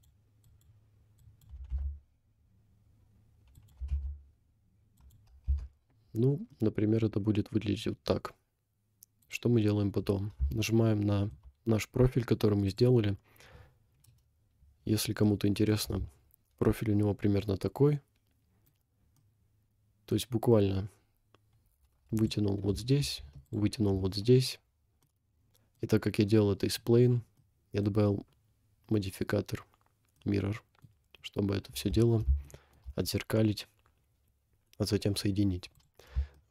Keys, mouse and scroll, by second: 0.6 click, 1.2 click, 1.6 g, 3.8 g, 5.5 Tab, 6.7 middle click, 7.0 scroll down 2, 7.9 scroll down 1, 8.3 scroll up 1, 9.2 click, 10.7 shift+middle click, 11.5 scroll up 1, 12.7 click, 14.1 KP_Decimal, 14.8-15.1 scroll down 4, 15.3 middle click, 16.0 Tab, 16.1 scroll up 3, 16.6-18.0 middle drag, 19.0 scroll up 1, 19.2 middle click, 22.2 alt+click, 23.5 alt+click, 24.6-25.1 scroll down 3, 25.0 middle click, 26.5 middle click, 27.1 scroll up 3, 27.7 middle click, 30.2 middle click, 31.0-31.8 scroll down 4, 31.8 Tab, 32.4 shift+middle click, 35.8 click, 36.3 shift+middle drag.